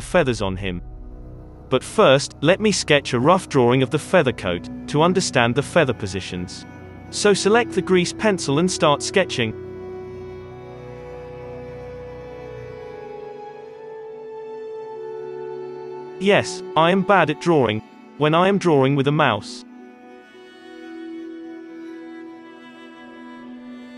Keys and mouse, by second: 2.1 KP_3, 2.9 alt+a, 4.3 d, 5.3 click, 6.2 middle click, 7.0-15.0 drag, 7.0-15.0 right drag, 15.0 middle click, 15.5-18.2 drag, 16.5 middle click, 17.1 ctrl+z, 18.2-19.9 middle drag, 18.8 click, 19.1 ctrl+z, 19.4 click, 20.1 ctrl+z, 20.2 click, 20.2 middle click, 20.9-22.5 drag, 20.9-22.5 middle drag, 21.3 ctrl+z, 22.6 middle click, 23.1-23.9 drag.